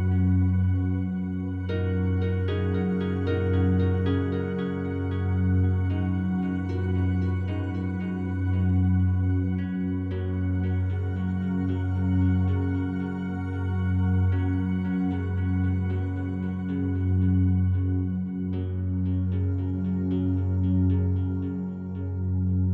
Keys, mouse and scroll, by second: 0.1-4.4 alt+drag, 4.4 a, 4.8-14.9 alt+drag, 15.7 alt+shift+right click, 16.9 g, 17.1 g.